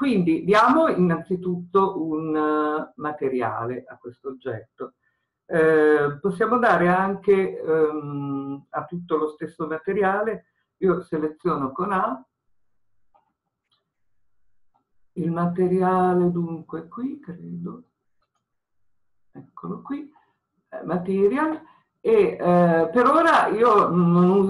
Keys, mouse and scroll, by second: 11.4 a, 19.7 click.